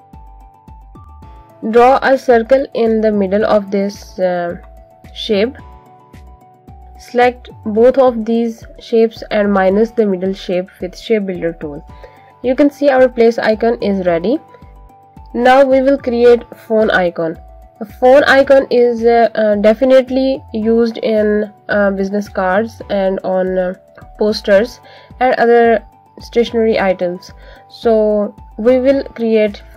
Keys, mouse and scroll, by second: 0.6 right click, 1.5 click, 5.1 click, 8.9 click, 12.7 click, 18.3 click.